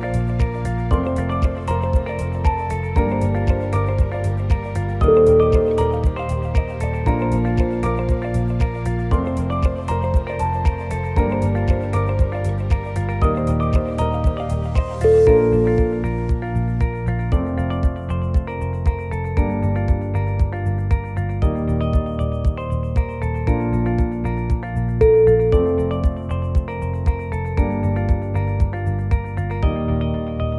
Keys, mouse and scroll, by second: 1.9 click, 2.4 g, 4.1 g, 6.2-6.7 scroll down 2, 6.3 middle click, 6.4 middle click, 7.0 click, 7.8 g, 10.0 g, 11.5 middle click, 11.6 middle click, 12.4 KP_1, 12.9 shift+middle click, 13.3 shift+middle click, 13.3-14.1 scroll up 4, 14.1 click, 14.7 g, 16.2 scroll up 2, 16.4 1, 16.7 click, 17.2 g, 20.3 click, 20.7 shift+middle click, 20.7 scroll down 2, 20.8 middle click, 21.4-21.7 scroll up 1, 21.9 2, 22.1 middle click, 22.4 middle click, 22.8 shift+click, 23.3 g, 26.3 scroll down 1, 26.6 shift+middle click, 27.0 scroll up 2, 27.3 shift+middle click, 27.8 click, 28.3 shift+click, 28.8 click, 29.3 shift+middle click, 29.9 shift+click.